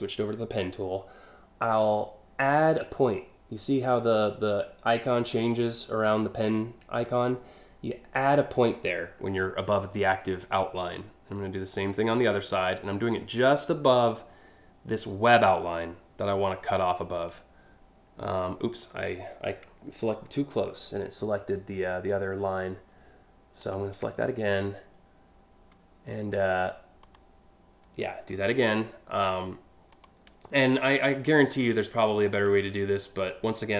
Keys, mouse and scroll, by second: 7.8 click, 16.8 click, 23.3 ctrl+click, 26.7 click, 27.6 scroll down 1, 28.0 scroll up 2, 28.1 scroll down 1, 29.5 ctrl+click, 30.5 ctrl+click, 30.9-32.1 ctrl+drag, 32.9 ctrl+click.